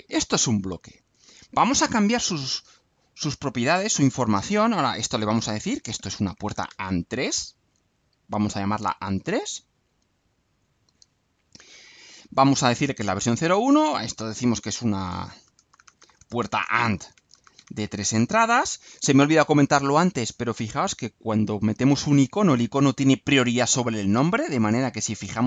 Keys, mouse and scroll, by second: 3.4 click, 4.8 click, 6.0-7.2 typing, 10.3 click, 13.4 click, 15.2-18.6 typing.